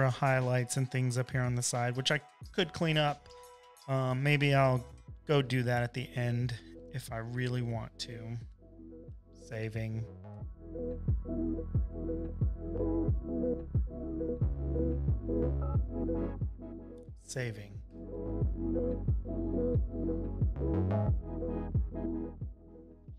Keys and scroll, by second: 5.2 space, 5.7 space, 6.3 space, 6.4 v, 7.8 space, 8.4 space, 9.2 shift+super+u, 9.8 super+s, 10.9 super+l, 17.1 super+j, 17.6 shift+super+u, 18.1 super+s, 18.7 super+l.